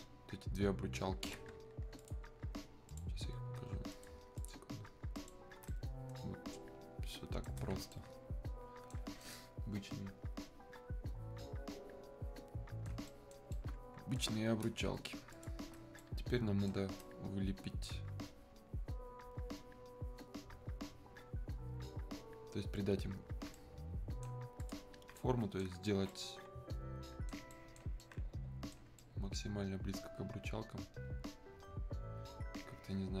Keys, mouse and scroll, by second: 2.0 ctrl+shift+click, 5.7-15.3 ctrl+shift+right drag, 15.3 ctrl+shift+click, 16.0-20.7 shift+right drag, 23.5 shift+right click, 24.6 alt+click, 25.2-33.2 alt+right drag.